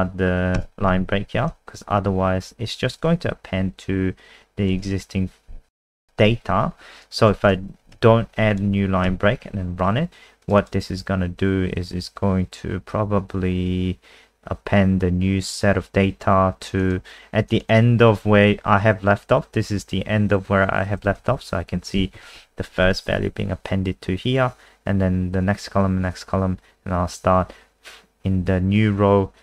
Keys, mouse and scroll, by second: 0.5 Return, 4.7 BackSpace, 8.0 ctrl+s, 8.5 click, 9.0 F5, 10.4 click, 10.6 click, 14.7 click, 17.7 click, 21.3 ctrl+shift+Right, 22.1 ctrl+shift+Right, 22.3 ctrl+shift+Right.